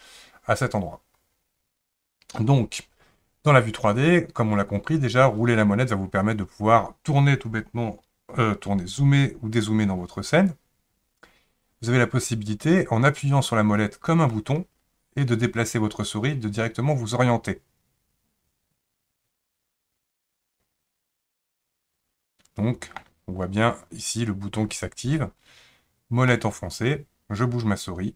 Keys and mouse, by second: 14.3-23.0 middle drag, 26.3-28.1 middle drag.